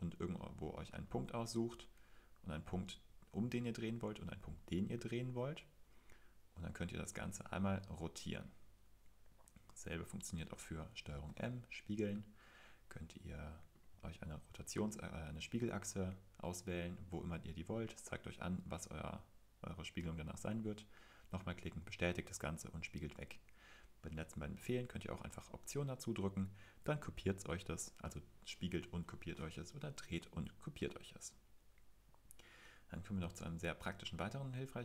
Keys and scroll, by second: 11.3 super+m.